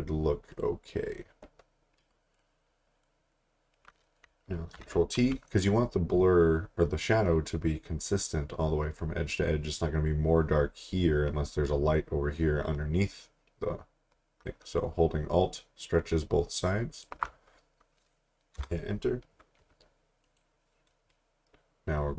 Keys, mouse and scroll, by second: 0.5 click, 4.6 t, 14.4 alt+Num_Lock, 14.8 alt+click, 18.6 Return, 20.2 click.